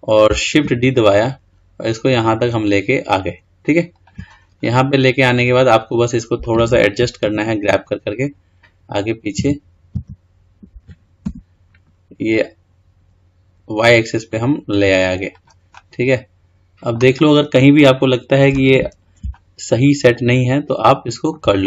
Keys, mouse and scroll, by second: 0.9 shift+d, 4.8-7.4 middle drag, 7.4 g, 15.9-18.2 middle drag, 18.2-19.6 scroll up 5, 19.6-21.6 shift+middle drag.